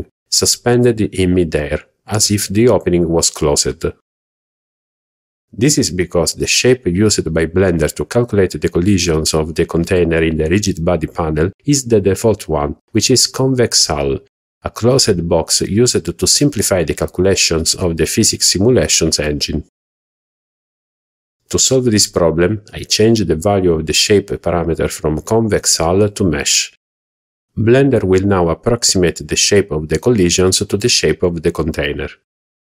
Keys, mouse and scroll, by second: 3.8-4.3 scroll down 3, 5.7 click, 13.7 click, 23.1-29.4 drag, 31.3-31.8 middle drag.